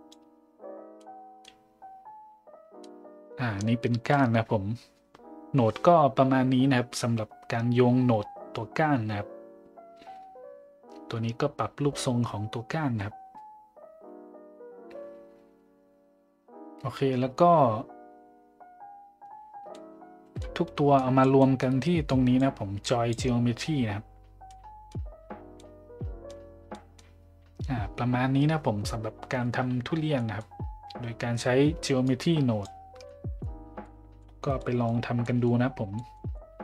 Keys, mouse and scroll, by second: 1.0 middle click, 2.9 middle click, 19.7 middle click, 21.0 click, 21.4 middle click, 22.1 click, 22.8 click, 24.5 middle click, 25.6 middle click, 26.8 middle click, 30.2 middle click, 32.1 click, 33.0-33.4 middle drag, 33.8-34.2 middle drag, 34.5-34.8 middle drag, 35.2 middle drag, 36.0 middle drag, 36.3-36.6 middle drag.